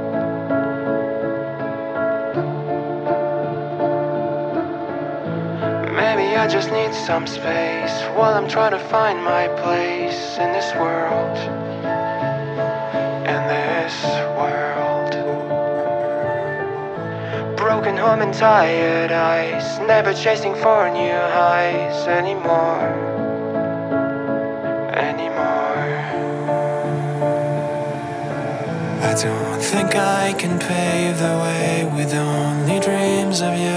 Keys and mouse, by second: 0.9 click, 6.9-8.1 middle drag, 13.9 middle click, 16.3 KP_1, 18.5 shift+middle click, 20.0 3, 20.3 click, 21.8 middle click, 22.8 e, 25.3-28.0 drag, 28.0 KP_1, 30.9 shift+middle click.